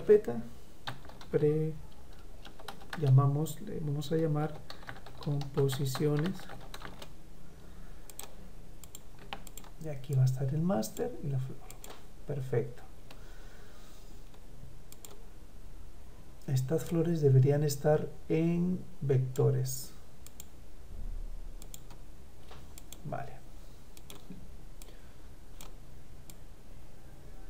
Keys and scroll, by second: 2.3 BackSpace, 4.4 Caps_Lock, 6.7 Return.